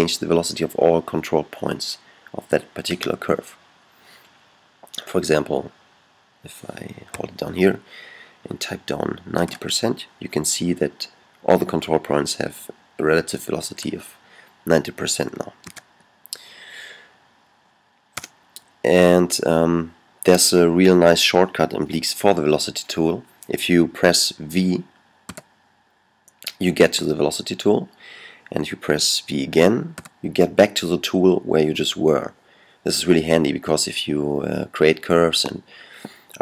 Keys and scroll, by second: 9.2 alt+9, 15.5 super+z, 25.2 v, 29.7 v.